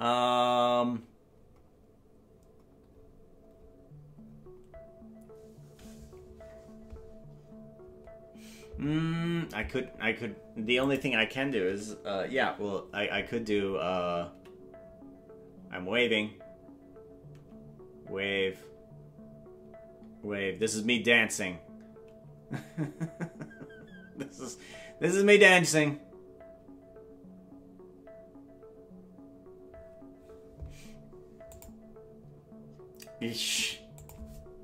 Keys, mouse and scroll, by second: 14.3 5, 17.3 5, 19.5 5, 21.9 5, 24.3 5, 26.5 5.